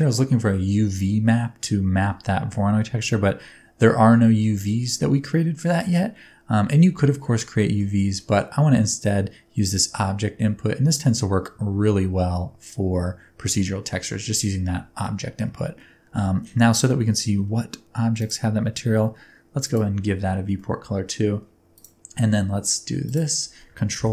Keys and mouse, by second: 7.5 middle click, 8.3 middle click, 9.8-10.9 drag, 18.2 click, 20.6-21.1 middle drag, 23.0 shift+click, 24.0 ctrl+l.